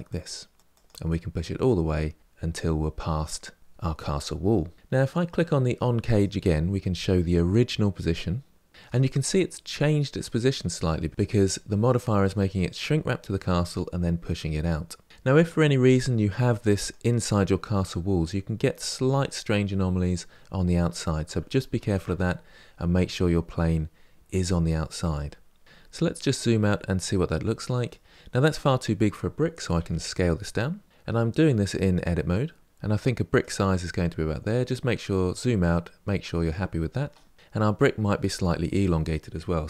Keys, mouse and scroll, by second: 1.4-3.5 middle drag, 5.9 click, 6.7-8.7 middle drag, 10.0-15.6 middle drag, 15.6 g, 17.0-20.0 middle drag, 21.5 ctrl+z, 21.9-24.9 middle drag, 25.6-26.1 scroll down 6, 26.1-29.1 middle drag, 29.5 s, 33.7-34.3 scroll down 3, 34.3-37.1 middle drag, 37.1 scroll up 2, 37.3 middle click, 38.0 click, 39.5 g.